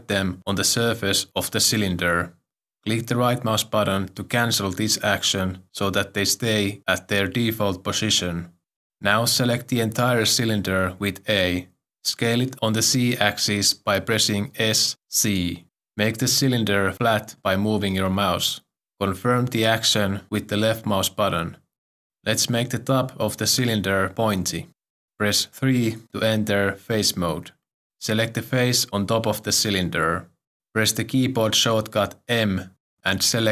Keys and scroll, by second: 11.2 ctrl+r, 11.3 a, 14.5 s, 15.1 z, 25.7 3, 32.3 m.